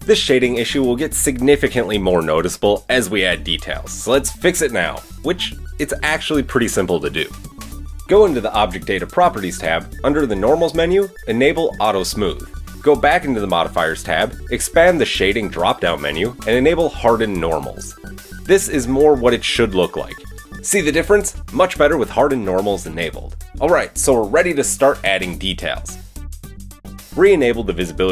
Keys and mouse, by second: 8.8-10.8 middle drag, 10.8-12.3 drag, 12.3-13.1 middle drag, 13.1 click, 14.0-15.5 middle drag, 15.5-16.7 drag, 16.7-20.8 middle drag, 20.8 click, 22.7 middle click, 23.1 click, 23.2-26.7 middle drag, 26.7-28.1 drag.